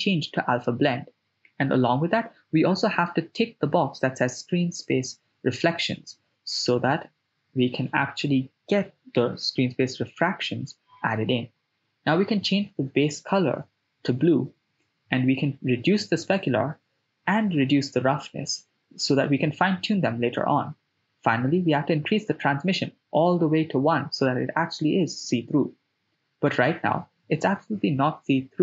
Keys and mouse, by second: 4.7 click, 5.9 click, 6.5 middle click, 7.9-8.6 drag, 9.9 click, 14.9-15.9 drag, 16.7-17.9 drag, 19.3-21.2 drag, 27.1 middle click, 27.8 ctrl+middle click, 28.5 middle click.